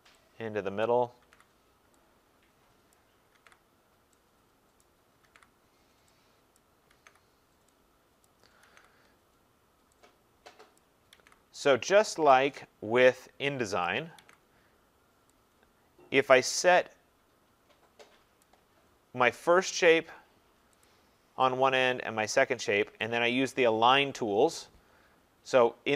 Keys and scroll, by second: 14.1 ctrl+v.